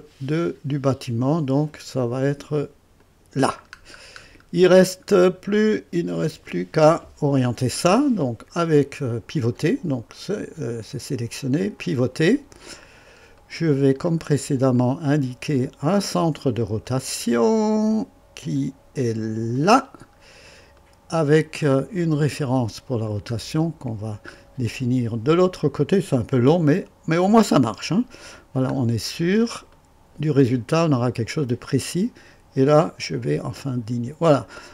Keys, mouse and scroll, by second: 3.0 click, 3.7-4.5 scroll down 2, 5.1 scroll down 1, 5.6-6.3 right drag, 11.8 click, 12.8-13.1 scroll up 2, 13.4 right click, 14.1-14.5 scroll up 2, 14.8 right click, 15.5 right click, 16.2-16.5 scroll up 2, 16.9 right click, 19.5 click, 20.1-20.5 scroll down 1, 20.8 right click, 21.4-22.1 scroll down 3, 22.4 right click, 23.1 scroll down 2, 23.6 right click, 24.3-25.1 scroll up 3, 25.3 right click, 28.1 click, 28.7-29.4 scroll down 3, 29.7 right click, 30.4 scroll down 2, 33.6 click.